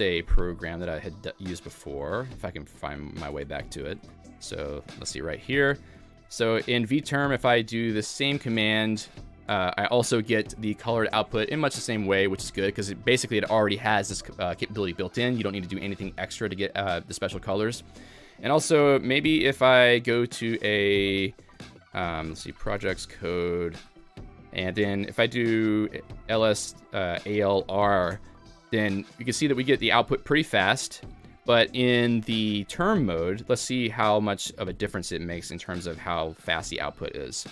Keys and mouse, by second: 0.0 Escape, 1.3-2.0 typing, 1.5 click.